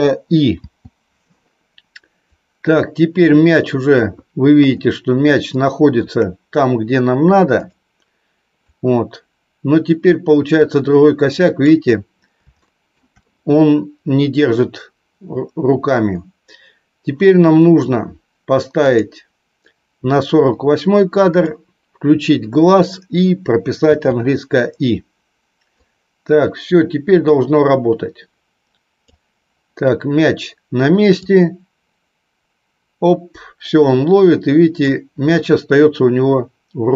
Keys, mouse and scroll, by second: 2.5-4.1 drag, 5.4 shift+middle click, 7.8 click, 8.9-11.9 drag, 12.6 shift+middle click, 19.0 click, 25.9-29.2 drag, 31.3-35.2 drag.